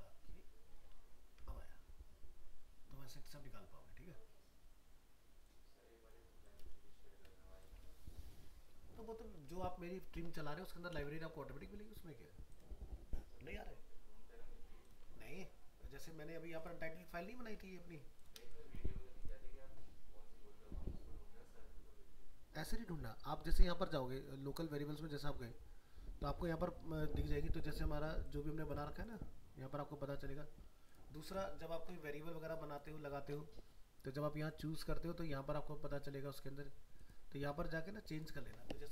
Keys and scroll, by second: 0.7 ctrl+v.